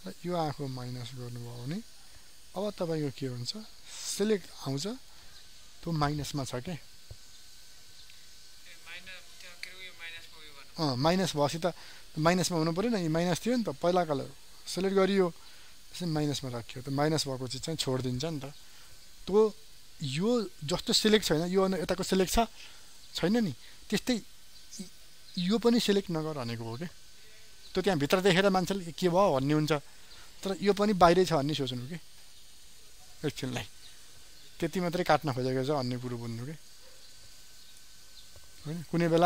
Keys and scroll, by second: 36.3 ctrl+alt+z.